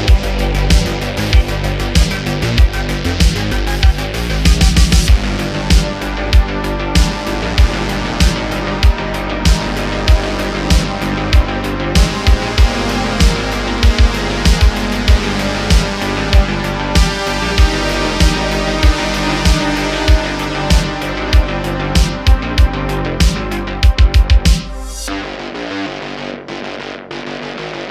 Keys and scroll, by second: 5.8 super+a, 6.7 super+z, 7.3 super+a, 8.4 shift+s, 10.4 t, 10.6 ;, 14.2 s, 17.4 shift+a, 18.4 s, 19.3 ., 20.1 s, 21.9 9, 22.0 0, 22.1 Return, 23.8 s.